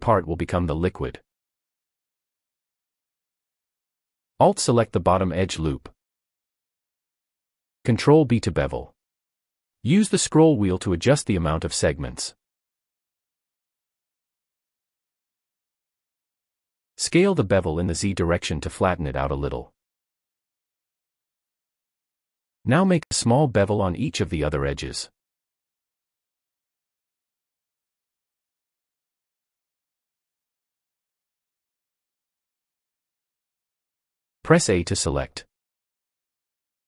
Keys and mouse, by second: 1.6 click, 8.4 ctrl+b, 13.4 click, 14.5 g, 14.8 z, 17.1 s, 17.5 z, 21.6 shift+middle click, 23.2 ctrl+b, 26.3 shift+middle click, 26.7 click, 27.1 middle click, 28.4 ctrl+b, 30.5 alt+click, 31.1 ctrl+b, 32.9 shift+middle click, 33.3 middle click, 35.2 a.